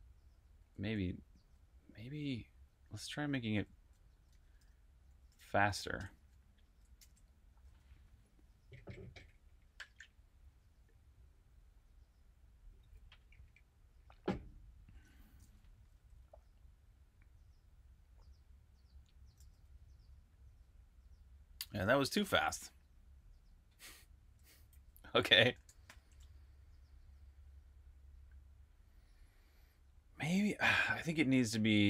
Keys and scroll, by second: 0.4-7.2 typing, 15.4-16.3 typing, 19.0-19.8 typing, 22.0 super+q, 24.1-26.0 typing, 31.5-31.8 typing.